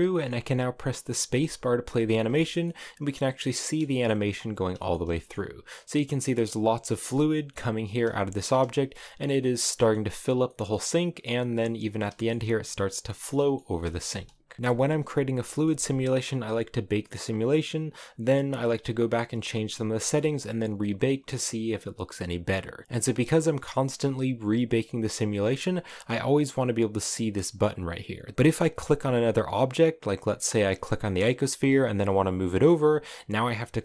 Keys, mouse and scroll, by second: 0.9 space, 1.5-2.1 scroll down 4, 2.1 shift+middle click, 3.1 scroll down 1, 3.3 middle click, 3.8 scroll up 5, 4.2 middle click, 4.5 shift+middle click, 4.6 scroll down 3, 4.8-11.6 middle drag, 11.6 click, 12.0 shift+middle click, 12.1 scroll up 2, 13.1 middle click, 13.4 space, 13.4 middle click, 13.9-14.5 scroll down 2, 14.5 click, 14.6 space, 15.2 middle click, 15.4 space, 22.8 scroll down 1, 28.3 scroll down 3, 29.0 right click, 29.9 right click, 30.4 right click, 31.2 g, 33.5 right click.